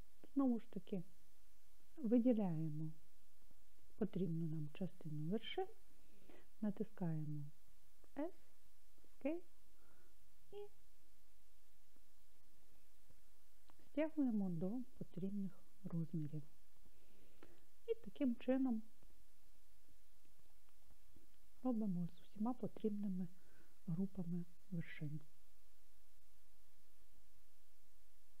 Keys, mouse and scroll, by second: 0.5-2.8 drag, 8.3 s, 12.7 click, 15.5 scroll down 1, 20.5 click, 21.6 click, 25.0 s.